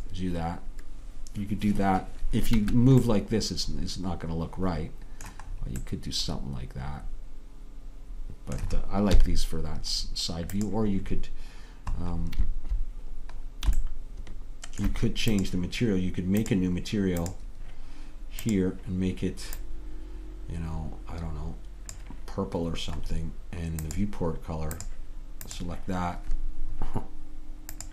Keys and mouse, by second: 2.6 Escape, 5.9 middle click, 6.2 middle click, 7.3 middle click, 9.2 KP_3, 15.4-20.5 drag, 23.9-25.8 drag.